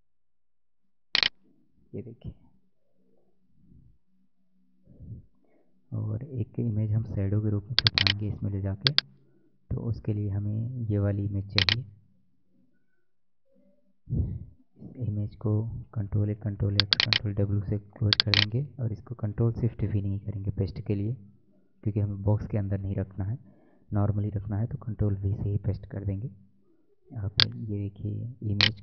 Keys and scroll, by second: 2.2 Down, 6.0 alt+Tab, 14.5 ctrl+a, 16.1 ctrl+w, 25.0 ctrl+v.